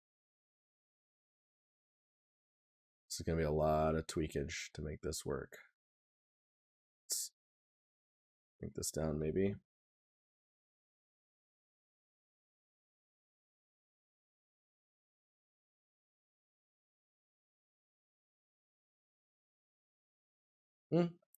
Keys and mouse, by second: 9.1 right click, 10.9 right click, 20.9 right click.